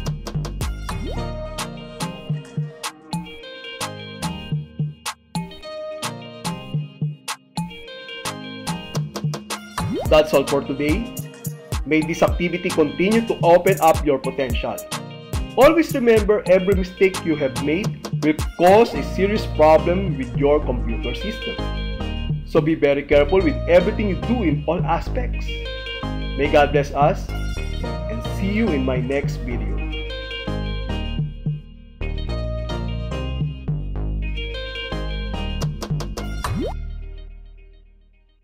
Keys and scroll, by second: 1.4 ctrl+w, 2.8 Escape, 5.7 Return.